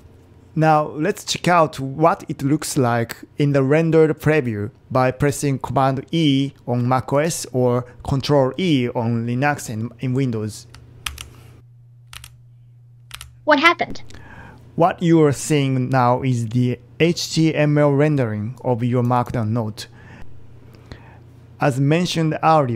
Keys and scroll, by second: 0.0-1.9 typing, 11.1 super+e, 12.2 super+e, 13.2 super+e.